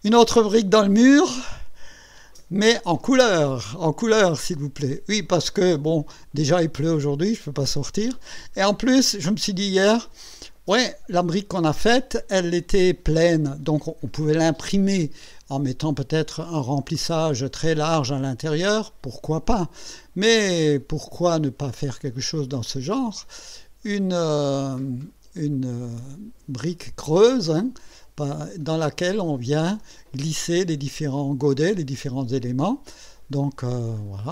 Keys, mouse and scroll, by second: 20.3-30.1 drag, 32.8-33.6 drag, 34.0-34.3 drag.